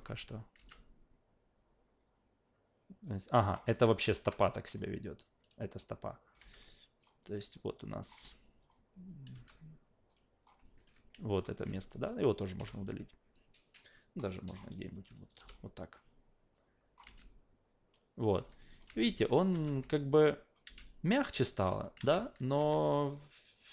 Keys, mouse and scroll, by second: 0.6 alt+v, 0.6-3.5 alt+drag, 4.2 q, 4.7 click, 5.9-6.3 drag, 6.4 f, 7.0 click, 7.5 click, 8.1 f, 8.6 click, 9.3 e, 10.1-10.4 drag, 10.8 ctrl+z, 11.4 alt+right click, 11.9 click, 12.6 Delete, 13.7-14.5 drag, 15.4 Delete, 16.5 click, 17.1 alt+v, 18.4 alt+v, 18.7 click, 18.9 alt+v, 19.5 alt+v, 19.7 click, 20.1-20.5 alt+drag, 20.6 alt+v, 21.2 alt+click, 21.6 alt+click, 22.0 alt+v, 22.6 q, 23.0 click.